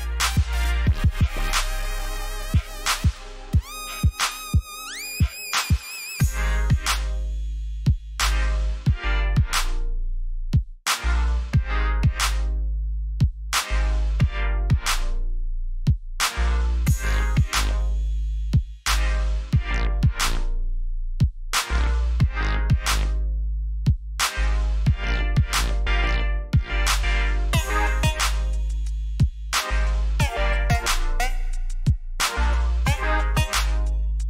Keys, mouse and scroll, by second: 2.4 ctrl+j, 6.7 click, 9.0 v, 9.7-10.3 alt+scroll down 2, 10.3 click, 12.1 alt+click, 15.6 ctrl+t, 16.2 right click, 18.0 click, 27.3 e, 28.7 shift+right click, 30.1 Escape, 30.8 alt+right click.